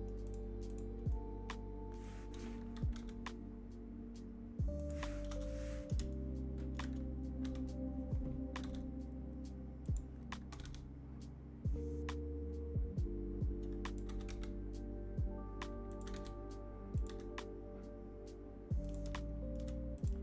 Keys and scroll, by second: 2.7 g, 5.2 KP_0, 7.4 g, 8.6 g, 10.5 r, 14.0 g, 16.0 g, 17.0 g.